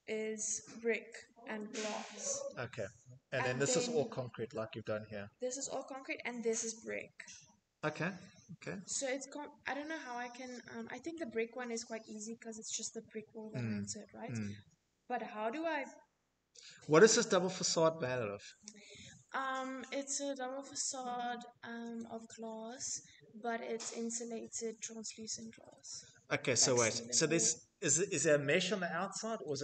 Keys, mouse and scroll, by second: 8.2 middle click, 8.3 Escape, 8.3 middle click, 10.0 scroll, 14.3 scroll.